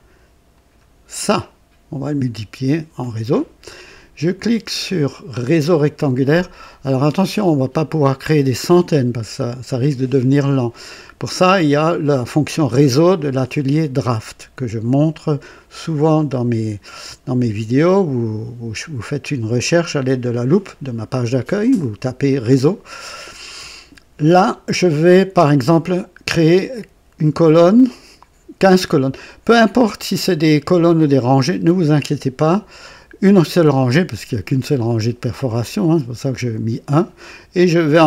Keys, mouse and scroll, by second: 0.4 click, 6.7 click.